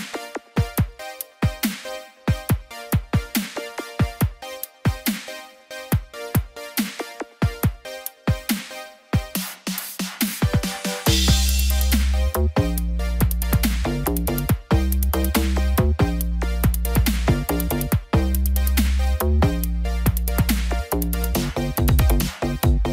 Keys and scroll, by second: 15.7 ctrl+t.